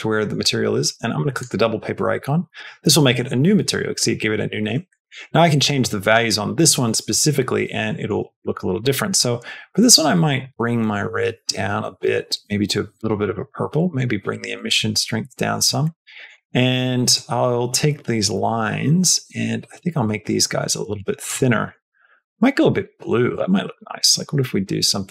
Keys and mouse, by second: 1.2 click, 4.9 shift+middle click, 5.7 shift+middle click, 7.8 shift+middle click, 8.4 shift+middle click, 9.0 click, 13.1 click, 13.8-15.5 drag, 15.8 middle click, 16.0 middle click, 17.1-21.1 shift+drag, 21.5 middle click, 21.7 middle click, 22.4 click.